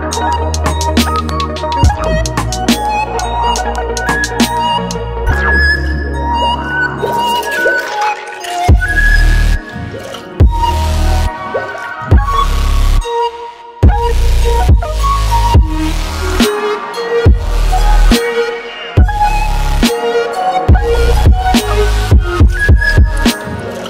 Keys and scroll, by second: 10.4 ctrl+d.